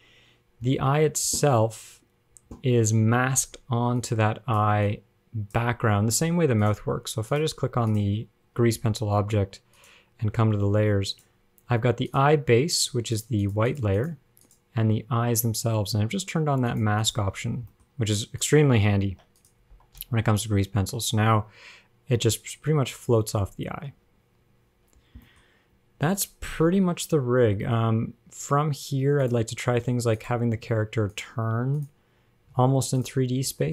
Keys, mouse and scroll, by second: 0.0 click, 0.9 scroll down 9, 2.1-2.9 scroll up 2, 3.1-4.0 scroll up 5, 4.3 click, 5.1 click, 6.3 ctrl+Tab, 6.9 click, 7.5 click, 8.1 click, 10.0 click, 11.4 click, 12.3 click, 13.3 click, 13.7 click, 13.9 click, 14.2 click, 14.7 click, 17.0 click, 17.3 click, 17.8-18.2 scroll down 2, 17.9 middle click, 18.2 scroll up 1, 18.7 click, 19.3 ctrl+Tab, 19.6 click, 20.3 g, 25.2 scroll down 9, 25.5 middle click, 25.8-26.8 scroll up 3, 26.8 KP_0, 27.6 scroll down 3, 27.9 shift+middle click, 28.5-29.0 scroll up 2, 29.5 click, 30.2 ctrl+Tab, 30.5 click, 31.1 ctrl+Tab, 31.9 click, 32.8 ctrl+Tab, 33.2 click.